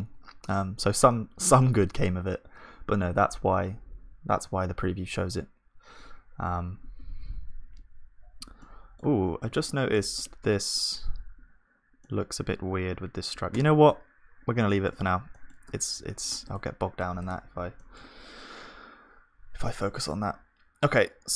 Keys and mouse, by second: 8.2-11.2 middle drag, 10.4 Tab, 10.4 click, 10.4 right click, 12.0 click, 12.0-14.7 middle drag, 12.0 right click, 18.5 KP_1, 20.0 s.